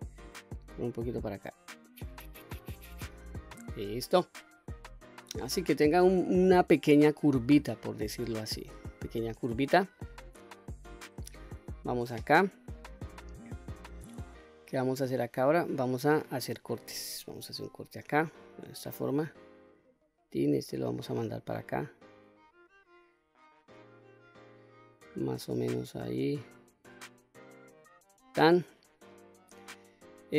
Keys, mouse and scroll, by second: 0.2-2.9 drag, 3.4 scroll down 1, 4.2-7.0 middle drag, 7.2-7.7 scroll up 1, 7.7 middle click, 8.6 shift+middle click, 9.4 scroll up 1, 9.7 middle click, 11.3 2, 12.0 middle click, 13.4 middle click, 17.2 ctrl+r, 27.7 click, 30.0 click.